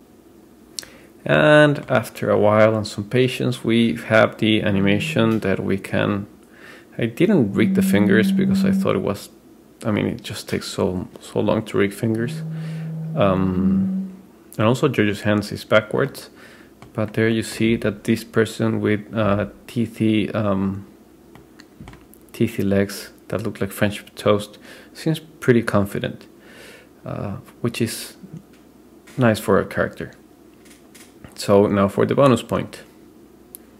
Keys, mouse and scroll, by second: 1.4-2.1 middle drag, 3.6 click, 5.2-15.9 drag, 16.1-17.0 middle drag, 17.4 middle click, 17.8-19.2 scroll down 2, 19.2 click, 20.1 click, 21.6 middle click, 22.3 scroll up 1, 24.8-25.2 scroll down 2.